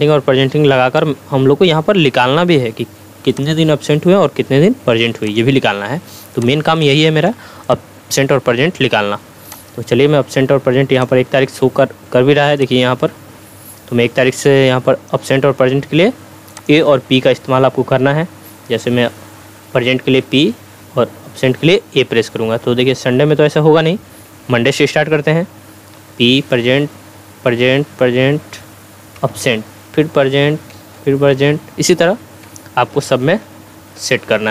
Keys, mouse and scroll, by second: 0.0 Right, 3.3-7.4 drag, 20.2 p, 20.5 Tab, 22.7 Left, 26.0 p, 26.3 Tab, 26.8 p, 27.5 Tab, 27.8 p, 28.1 Tab, 29.2 a, 29.4 Tab, 31.0 p, 31.3 Tab, 32.9-34.5 typing, 33.2 Tab, 34.0 Tab.